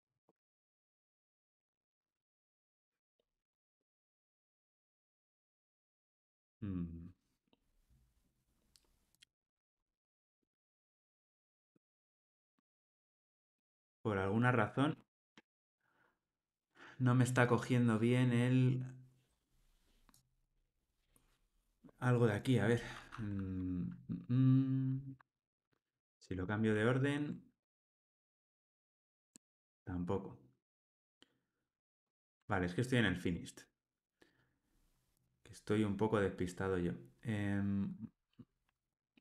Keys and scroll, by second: 4.5 ctrl+r, 25.1 super+x, 27.9 super+v, 29.3 super+v.